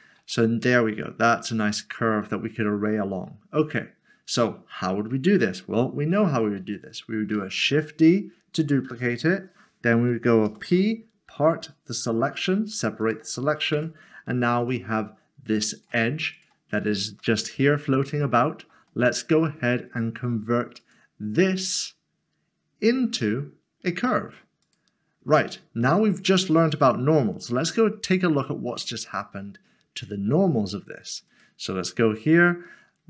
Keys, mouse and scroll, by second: 0.3 middle click, 7.5 d, 9.0 right click, 10.5 p, 13.0 click, 14.7 click, 17.2 click, 17.4 middle click, 18.9 shift+middle click, 24.6 click, 25.8 middle click, 26.7 scroll up 1, 31.3 click.